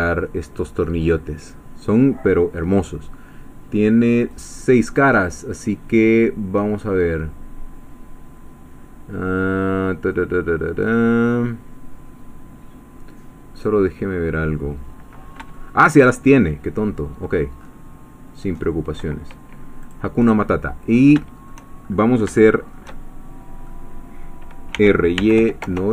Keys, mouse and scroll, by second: 4.3 click, 10.7-11.2 scroll down 2, 11.6 scroll down 1, 13.6-16.1 middle drag, 17.6 scroll up 1, 18.5 scroll up 1, 19.8 click, 20.3-21.6 middle drag, 21.8-22.2 shift+scroll up 3, 22.4-23.9 shift+middle drag, 24.5-25.9 typing.